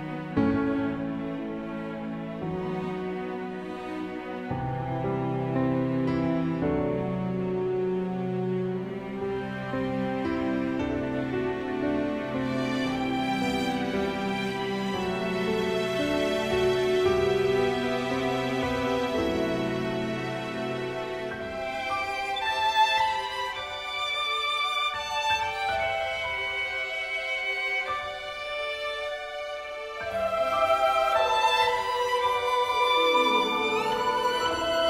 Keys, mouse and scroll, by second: 0.2 click, 0.4-2.2 middle drag, 2.2-7.9 drag, 7.9 shift+a, 11.3 click, 11.6 shift+a, 17.9-34.8 drag.